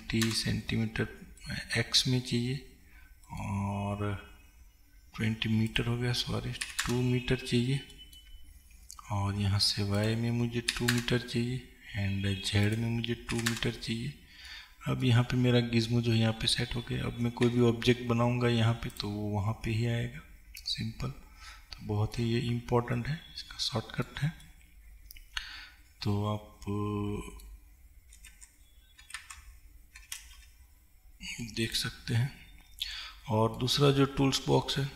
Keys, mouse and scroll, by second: 0.3-1.6 drag, 1.6-6.8 middle drag, 2.1-3.4 scroll down 2, 3.7-4.4 scroll down 2, 4.4-6.8 scroll up 2, 6.8-8.0 drag, 8.0-11.0 middle drag, 8.6-9.2 scroll up 2, 9.2-11.0 scroll up 1, 11.0-14.6 drag, 14.6-31.8 middle drag, 17.9 shift+a, 22.6-23.1 scroll down 2, 23.1 scroll down 1, 31.8 click, 32.2-34.9 middle drag.